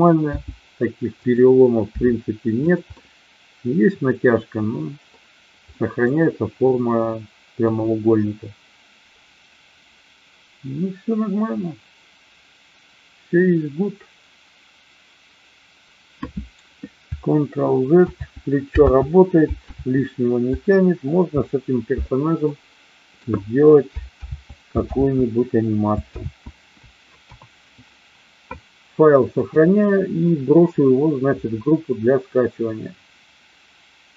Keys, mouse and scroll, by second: 0.3 g, 1.1 click, 1.9 r, 2.6 click, 2.9-5.1 middle drag, 5.6-6.0 middle drag, 7.5 KP_1, 18.0 ctrl+z, 18.9 ctrl+z, 19.8 a, 22.4-23.1 middle drag, 24.1 ctrl+z, 24.9 ctrl+z, 26.1 ctrl+z, 27.1 KP_1, 29.4-34.1 drag.